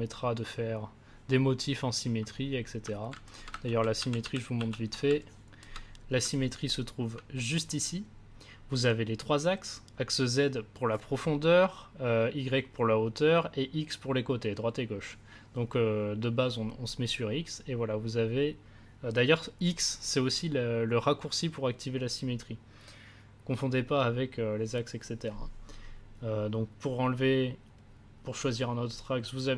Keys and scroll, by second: 3.6 ctrl+z.